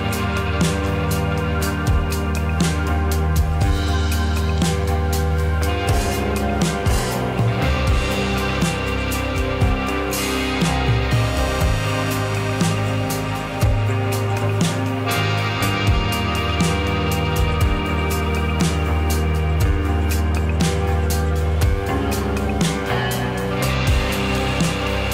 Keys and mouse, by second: 1.6-3.3 drag, 3.3 g, 7.2 click, 9.4 click, 10.2 shift+a, 24.7 click.